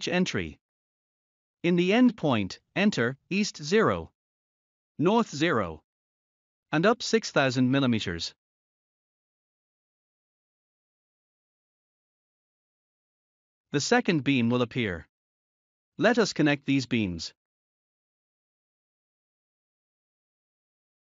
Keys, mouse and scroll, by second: 4.7 0, 5.8 Tab, 7.6 0, 8.3 Tab, 10.2-12.0 typing, 14.9 Return, 16.9 scroll down 1, 18.6 scroll up 1, 19.8 scroll down 1.